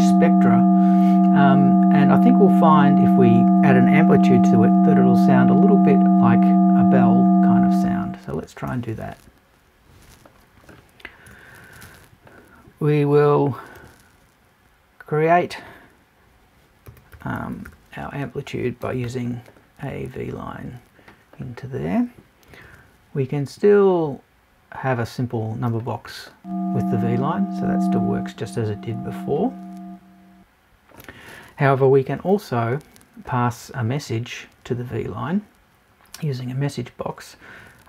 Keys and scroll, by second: 11.3 BackSpace.